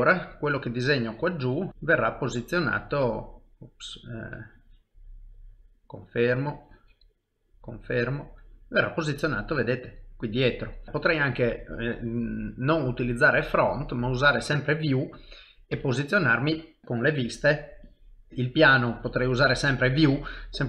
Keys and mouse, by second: 1.0 click, 4.2 click, 8.0 middle click, 13.4 click, 15.0 middle click, 15.7 KP_1, 16.5 KP_3, 16.8 click, 18.3 middle click, 19.3 middle click.